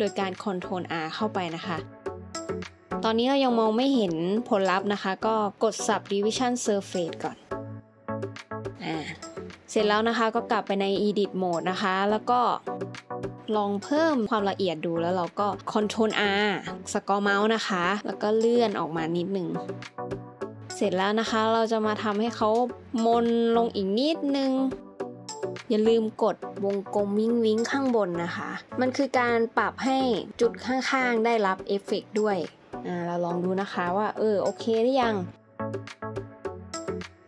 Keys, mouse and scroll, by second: 9.9 middle click, 10.5 scroll up 1, 13.0 Tab, 15.5 middle click, 16.6 ctrl+r, 17.0-17.5 scroll up 1, 18.2 s, 18.6 x, 21.5 scroll up 1, 28.3 scroll up 1, 28.9 scroll down 1, 36.3 s.